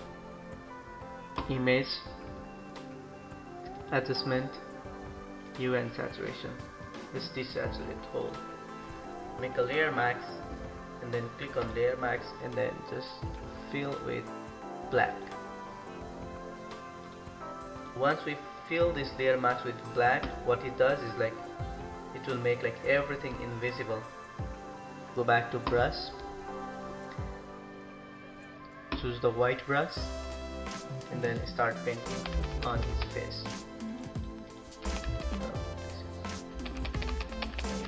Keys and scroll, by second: 32.3 [, 32.5 [, 32.7 [, 32.8 [, 34.8 [, 35.0 [, 35.1 [, 36.4-37.8 typing.